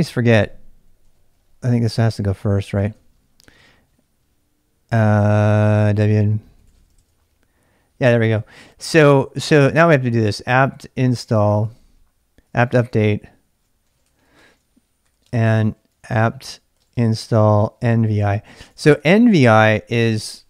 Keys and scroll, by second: 0.0-3.6 typing, 5.1-7.3 typing, 10.0-20.4 typing.